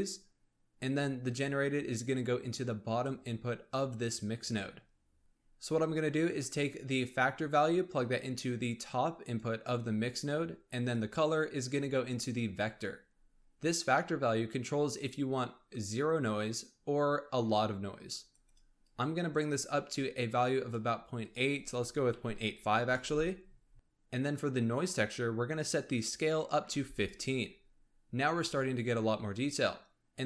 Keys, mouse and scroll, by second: 0.8 click, 5.2 click, 6.9 click, 9.7-10.8 scroll up 3, 10.8 click, 15.2-18.2 drag, 18.7-23.7 drag, 23.7 middle click, 25.9-27.1 drag.